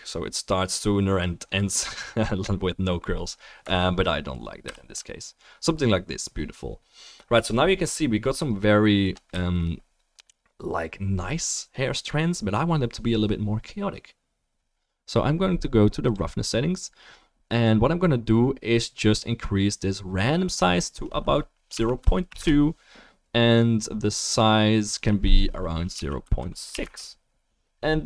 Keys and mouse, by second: 4.9 ctrl+z, 7.6-9.4 middle drag, 9.6 middle click, 9.9-12.0 middle drag.